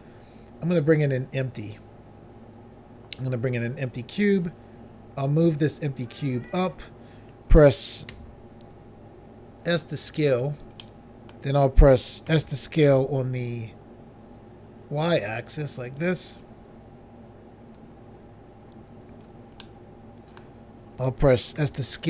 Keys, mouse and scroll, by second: 1.5 click, 1.6 click, 3.9 click, 4.0 click, 5.3 click, 8.1 s, 10.3 click, 10.5 click, 10.8 middle click, 12.3 s, 12.9 y, 15.9 click, 16.0 click, 17.8 click, 19.6 middle click, 21.6-21.9 typing.